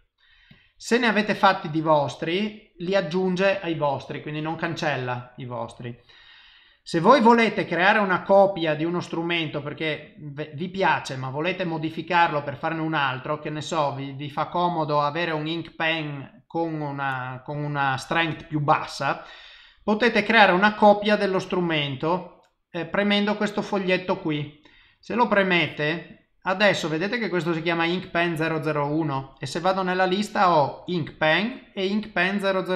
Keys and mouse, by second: 0.5 click, 8.9 click, 25.6 click, 29.1 click.